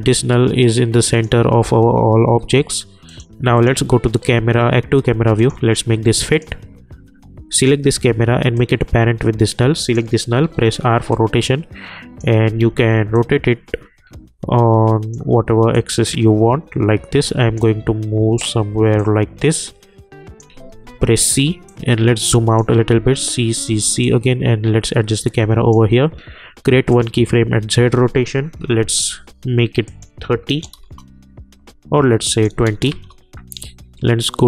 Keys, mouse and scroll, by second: 1.2 click, 10.4 r, 11.1-12.6 drag, 12.6 ctrl+z, 13.1-20.9 drag, 20.9 c, 21.7 click, 22.9 c, 23.4 c, 23.6 c, 24.0-26.9 drag, 28.7 =, 29.8 click, 30.7 Return, 32.3 click, 32.9 Return.